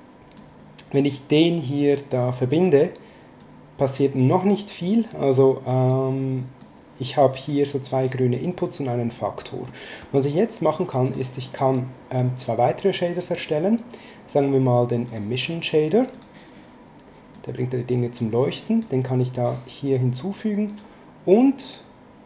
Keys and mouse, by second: 1.1 click, 3.4 click, 4.8 click, 5.9 click, 9.6 middle click, 11.1 click, 15.1 click, 16.1 click, 17.3 click.